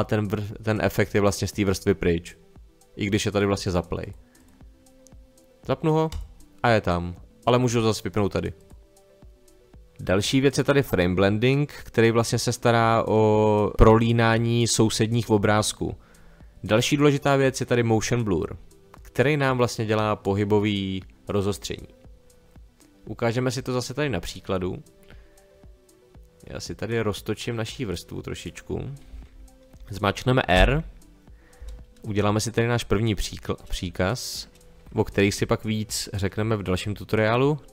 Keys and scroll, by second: 30.5 r.